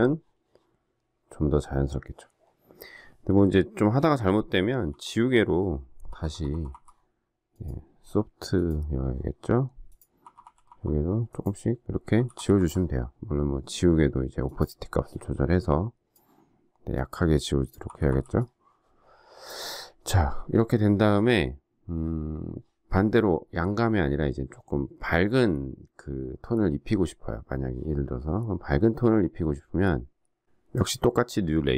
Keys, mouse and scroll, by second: 4.8 e, 6.0-6.6 typing, 10.2-10.6 typing, 12.1-12.5 typing, 17.8 typing.